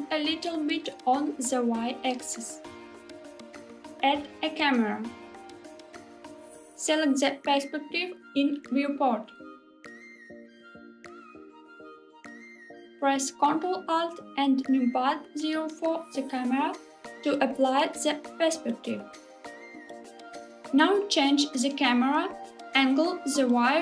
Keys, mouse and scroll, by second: 1.5 click, 2.1-3.3 middle drag, 3.7 click, 4.2 shift+a, 6.8-7.6 scroll up 1, 7.6 middle click, 8.8-9.6 scroll up 1, 9.9 shift+middle click, 15.8 ctrl+alt+KP_0, 20.3 g, 20.7 x.